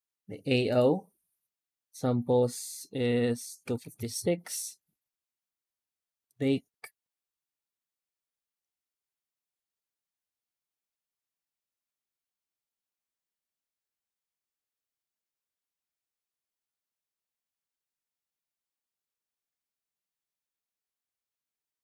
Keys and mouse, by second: 0.6 click, 1.9-4.1 drag.